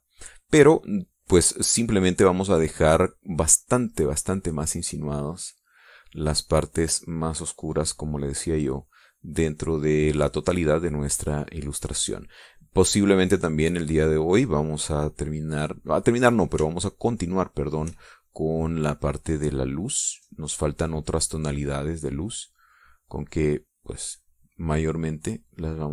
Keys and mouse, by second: 0.8 click, 1.4-2.6 middle drag, 2.8 middle click, 3.4 click, 5.3 click, 6.7-9.0 drag, 9.2-11.8 drag, 12.9-15.7 drag, 17.4-18.6 shift+drag, 18.8-23.6 shift+drag.